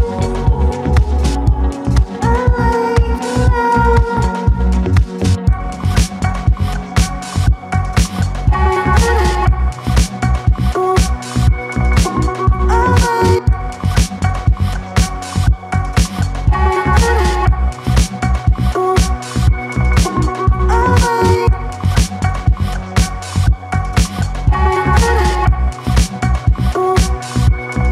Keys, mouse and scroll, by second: 0.7 Tab, 0.9 scroll up 1, 1.0 click, 1.3 click, 1.6 f, 2.2 click, 2.3 scroll down 1, 2.4 alt+click, 2.6 alt+middle click, 2.7 alt+click, 3.5 click, 3.6 alt+click, 4.1 alt+middle click, 4.2 alt+click, 4.9 click, 5.1 alt+click, 5.6 alt+middle click, 5.8 alt+click, 6.6 click, 6.7 alt+click, 6.8 alt+middle click, 7.0 alt+click, 7.1 alt+middle click, 7.2 alt+right click, 7.4 alt+click, 7.6 alt+right click, 7.7 alt+click, 9.5 click, 9.7 click, 9.8 alt+right click, 10.0 alt+click, 10.1 alt+right click, 10.2 alt+click, 11.0 alt+click, 11.3 z, 11.9 z, 12.2 click, 13.0 Tab, 13.9 scroll up 3, 14.1 alt+middle click, 14.5 shift+click, 15.2 alt+middle click, 16.1 shift+click, 16.4 alt+middle click, 17.0 alt+right click, 17.1 alt+click, 17.5 3, 18.0 alt+right click, 18.1 alt+click, 18.4 right click, 19.3 click, 19.6 click, 19.9 alt+click, 20.8 alt+middle click, 21.2-21.9 scroll up 1, 21.9 1, 22.4 alt+middle click, 22.6 alt+click, 23.2 alt+click, 23.5 alt+right click, 23.6 alt+click, 24.2 alt+middle click, 24.3 alt+click, 24.6 `, 24.8 z, 24.9 z, 26.0 shift+click, 26.4 alt+middle click, 26.8 alt+click, 27.5 3.